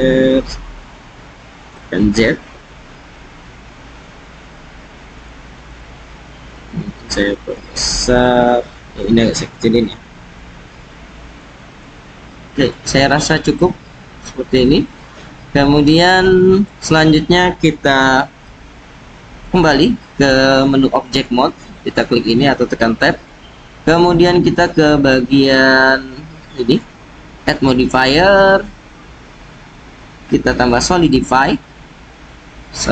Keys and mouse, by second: 0.2 x, 1.7 z, 5.1 click, 6.6-7.5 drag, 7.8-8.9 drag, 9.9 s, 11.2-12.6 drag, 13.5-14.3 drag, 16.3 click, 19.4 Tab, 21.1-21.9 drag, 25.7 right click, 28.5-30.8 drag.